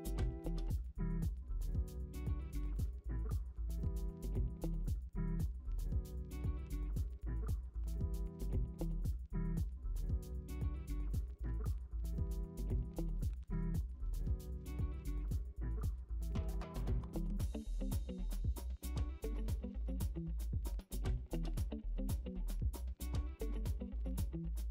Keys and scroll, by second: 0.8 ctrl+d, 1.4-1.9 typing, 3.1 ctrl+t, 3.5-4.1 Escape, 3.6 Return, 4.5 ctrl+d, 4.8-6.4 typing, 7.1 ctrl+z, 7.4-10.5 typing, 8.3 ctrl+d, 9.1 ctrl+d, 11.1 ctrl+d, 11.6-16.0 typing, 13.3 ctrl+d, 14.8 ctrl+alt+z, 15.0 ctrl+d, 15.4 Delete, 15.7 ctrl+d, 16.8 ctrl+d, 17.2 m, 17.4 v, 17.6 ctrl+t, 18.1 Return, 18.6-22.5 typing, 22.0 Delete, 22.3 ctrl+d, 23.2 ctrl+u.